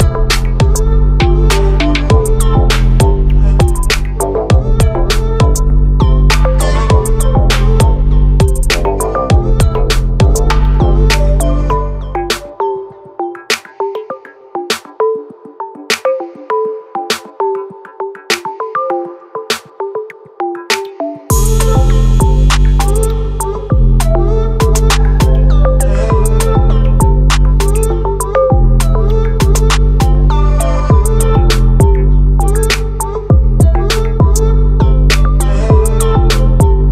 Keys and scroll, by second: 0.2 ctrl+t, 18.4 ctrl+=, 22.6 ctrl+z, 26.9 ctrl+0.